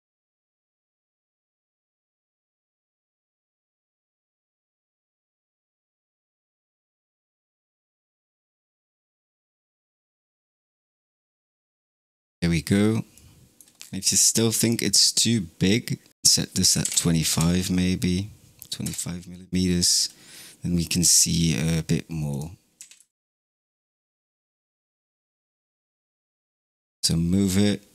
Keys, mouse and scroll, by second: 2.6 shift+d, 6.8 g, 9.6 g, 13.1-13.8 middle drag, 13.8-14.5 scroll down 12, 14.5-15.1 middle drag, 15.1 scroll up 3, 16.1-17.2 drag, 17.2 KP_0, 18.7 KP_0, 19.7-20.4 scroll up 7, 22.2 click, 22.7 g, 24.5 g.